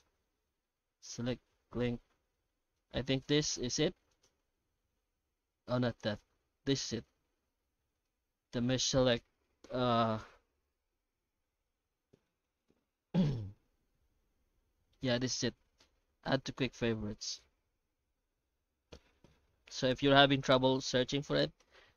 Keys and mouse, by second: 17.9 Tab, 18.3 Tab.